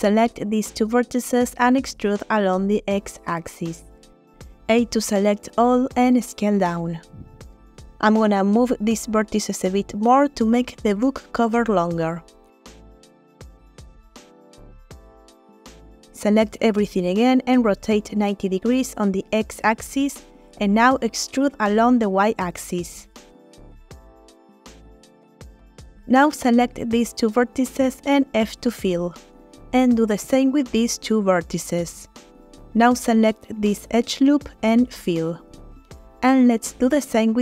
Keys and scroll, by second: 2.4 e, 3.3 x, 5.1 a, 5.3 s, 10.0 g, 10.2 x, 17.6 a, 18.0 x, 18.4 9, 18.5 0, 20.3 e, 21.9 y, 28.2 shift+f, 31.3 shift+f, 32.1 f, 35.9 f.